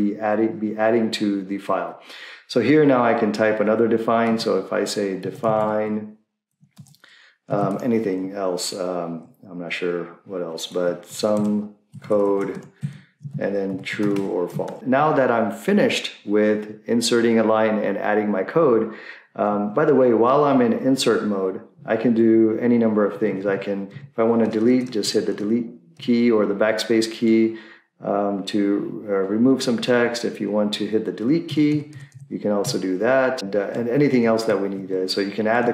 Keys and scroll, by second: 4.1-7.7 typing, 10.8-14.8 typing, 23.2 Left, 23.2 Left, 23.5 Right, 23.9 Right, 24.5-26.0 typing, 29.5 Left, 29.6 Left, 29.7 Left, 30.2 Left, 31.5 Delete, 31.7 Delete, 31.9 Delete, 32.1 Delete, 34.0 Left, 34.1 Left, 34.4 Right, 34.6 Right, 34.8 Right, 35.6 Left.